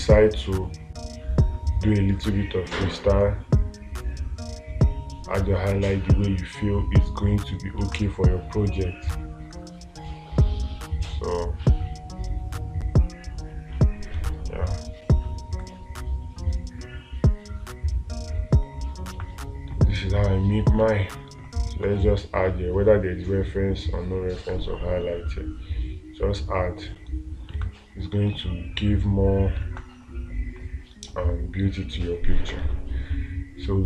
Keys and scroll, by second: 8.3 space, 21.3 space, 30.1 space.